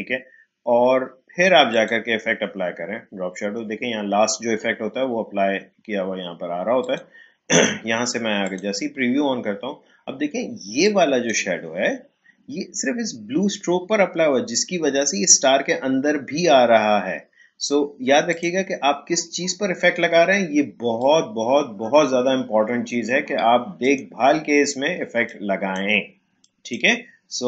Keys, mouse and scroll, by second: 1.7 click, 6.8 click, 10.8-13.8 drag, 18.2 click, 20.9-26.4 drag.